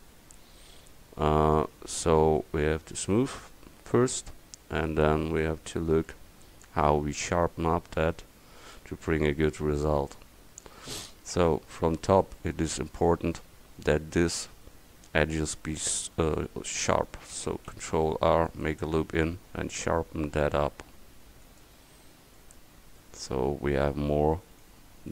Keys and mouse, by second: 0.5 drag, 3.6 middle click, 4.0-4.3 drag, 4.3-5.4 middle drag, 5.4-6.9 right drag, 6.9-8.7 middle drag, 9.5-10.2 middle drag, 10.2-11.4 drag, 11.4 Tab, 17.7 ctrl+r, 22.0 click, 22.7 Tab.